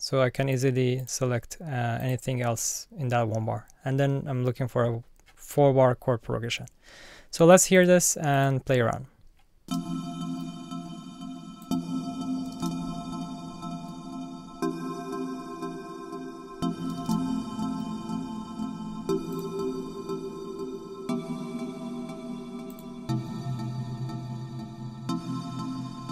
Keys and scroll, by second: 9.6 space, 12.4 space, 16.9 space.